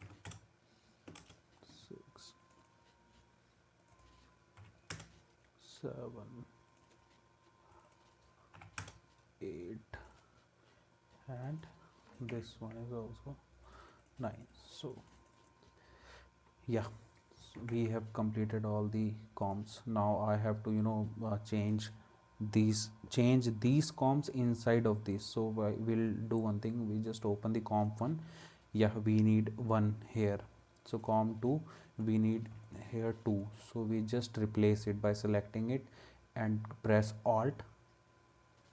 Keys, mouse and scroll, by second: 0.0 6, 1.2 Return, 4.6 7, 4.9 Return, 8.5 8, 8.8 Return, 12.3 Escape, 17.6 ctrl+s, 32.7 shift+click.